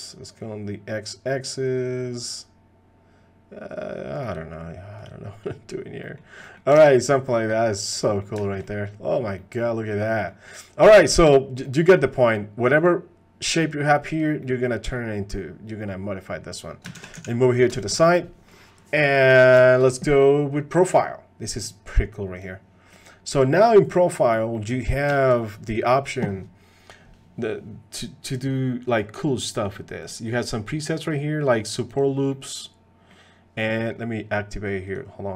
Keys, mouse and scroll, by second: 6.0 click, 6.4 click, 6.9 ctrl+Tab, 6.9 click, 8.0 drag, 8.4 shift+click, 8.6 click, 9.4 middle drag, 10.2 middle click, 11.6 middle click, 12.8 click, 14.4 middle drag, 17.1 shift+d, 17.8 shift+middle click, 22.4 click, 22.9 middle click, 24.0 middle drag, 24.5 middle click, 25.1 shift+middle drag, 25.4 middle click, 28.5 click, 30.1-32.0 drag, 32.3 middle click, 34.9-35.3 drag.